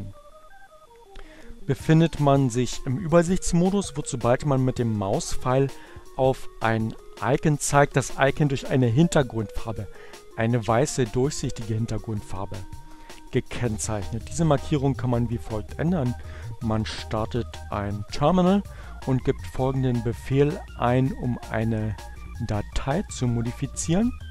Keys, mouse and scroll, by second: 15.7-17.9 drag, 23.2 Up.